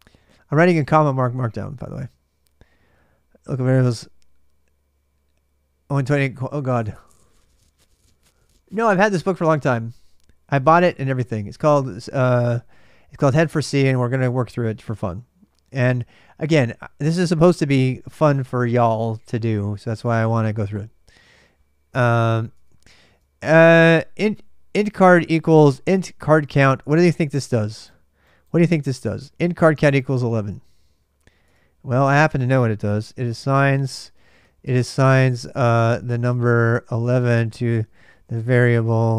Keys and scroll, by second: 22.3 alt+Tab, 23.4 alt+Tab, 31.2 alt+Tab, 32.4-39.1 typing.